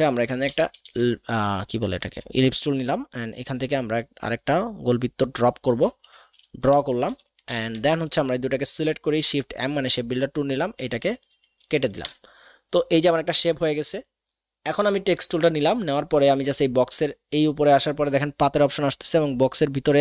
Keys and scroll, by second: 0.6 l, 7.4 shift+v, 9.3 shift+m, 12.0 v.